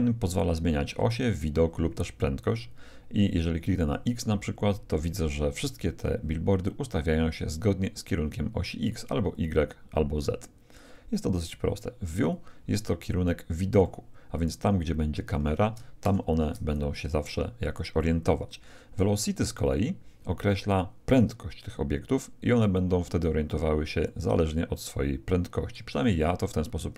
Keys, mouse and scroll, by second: 3.9-5.7 drag, 7.8-11.1 drag, 12.2-14.2 drag, 13.8-15.6 middle drag, 16.0 ctrl+shift+KP_0, 19.6-21.5 drag, 21.3-23.3 middle drag, 24.1-25.7 middle drag, 26.1-26.9 middle drag.